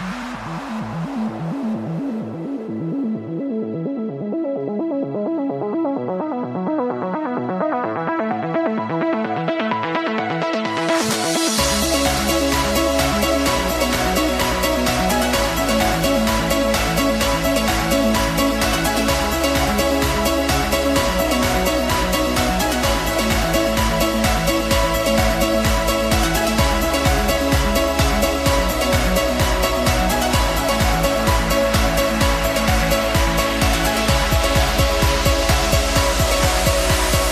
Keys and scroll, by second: 23.5 ctrl+t.